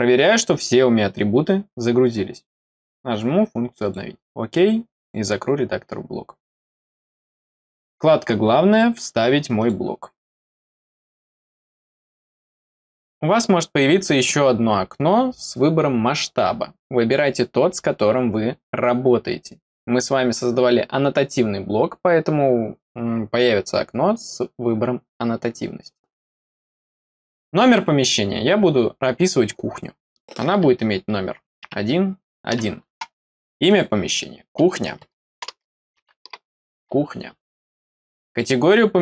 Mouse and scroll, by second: 2.6 click, 3.7 click, 4.9 click, 7.4 click, 8.6 click, 9.5 click, 10.9 click, 33.6 click, 38.2 click.